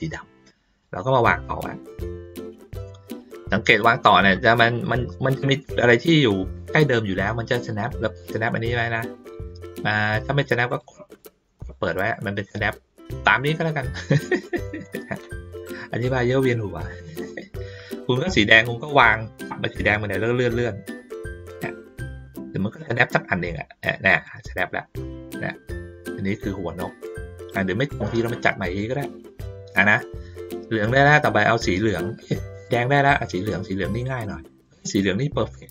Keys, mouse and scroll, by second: 0.8-3.3 drag, 4.8 ctrl+middle click, 5.1 ctrl+middle click, 10.7 click, 11.1 click, 11.6 click, 12.0 click, 14.5 middle click, 15.2 ctrl+middle click, 16.9 ctrl+middle click, 18.2 ctrl+middle click, 19.1-24.2 drag, 24.9 ctrl+middle click, 28.9 middle click, 29.7 ctrl+middle click, 30.8 ctrl+middle click, 32.0 click, 33.8-34.9 drag, 35.3 ctrl+middle click.